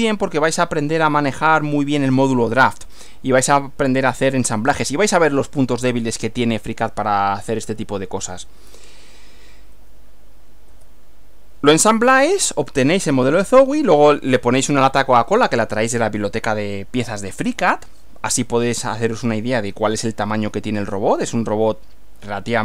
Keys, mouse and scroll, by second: 10.7 Right.